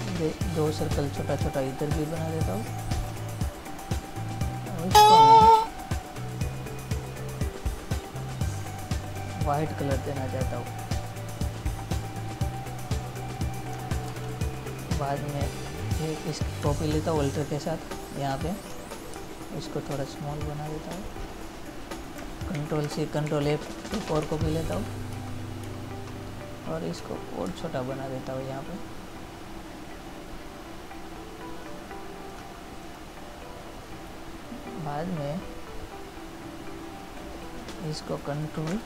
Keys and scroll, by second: 14.5 ctrl++, 22.9 ctrl+c, 23.6 ctrl+f.